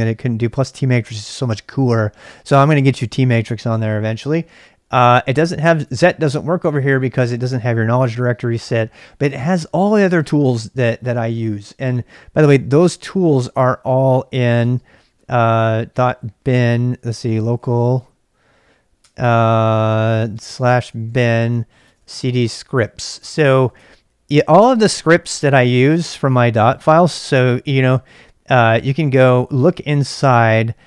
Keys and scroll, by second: 4.9-6.4 typing, 9.2 typing, 12.3-24.1 typing.